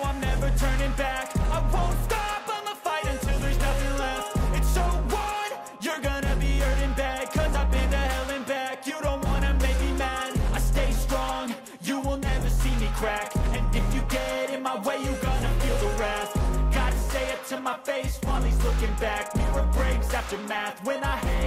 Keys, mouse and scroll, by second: 3.0-3.6 scroll down 1, 5.5 scroll down 1, 7.9 right click, 16.3 double click.